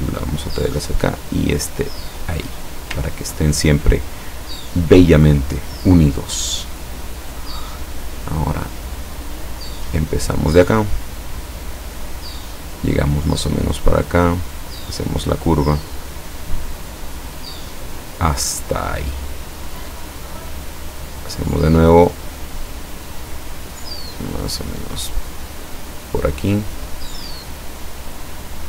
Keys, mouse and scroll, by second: 1.5-2.9 drag, 3.2 ctrl+scroll down 2, 5.3 click, 11.9 click, 13.7-14.8 drag, 17.5 click, 23.0 click, 24.8-26.2 drag.